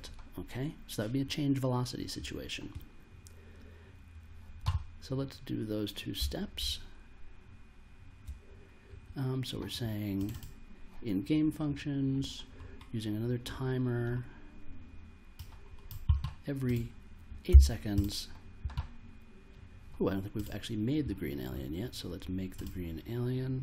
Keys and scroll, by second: 6.6 super+Tab, 17.5 8.